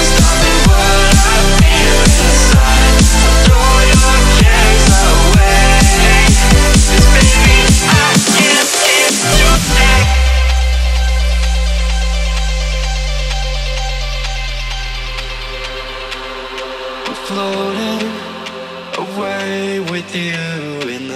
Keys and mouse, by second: 0.4 ctrl+=, 1.0 click, 1.7 space, 8.3 click, 8.7 right click, 9.7 click, 10.8 space, 10.9 click, 11.0 space, 11.5 click, 11.5 space, 12.3 ctrl+-, 15.0 space, 16.1-19.1 drag, 19.6 ctrl+-, 20.5 click, 20.5 space, 20.8 space.